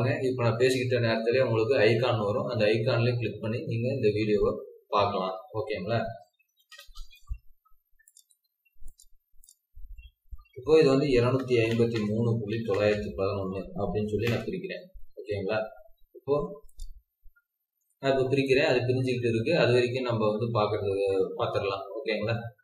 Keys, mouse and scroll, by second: 6.3-6.7 typing, 10.9-12.9 typing, 14.2 Return.